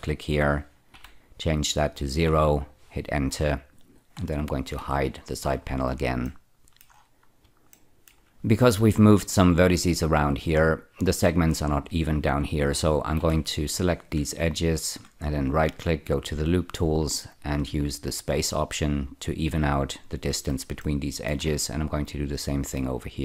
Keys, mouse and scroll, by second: 0.8 0, 2.2 Return, 4.7 n, 5.9 shift+n, 6.2 shift+middle click, 7.7 shift+middle click, 10.5-12.3 scroll up 1, 13.1 2, 13.7 click, 14.7 ctrl+click, 15.3 right click, 18.8 click, 20.7 shift+middle click, 22.3 click.